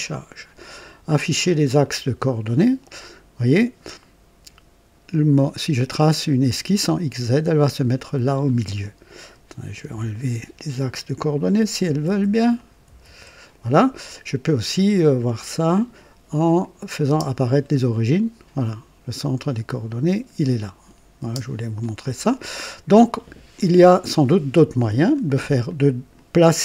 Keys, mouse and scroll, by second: 1.7 click, 9.7 a, 10.9 click, 11.6-13.5 typing, 12.5 click, 16.5 click, 17.0 space, 17.8 click, 21.2 space, 21.3 space, 21.7 click, 23.5-25.3 drag, 25.6 click.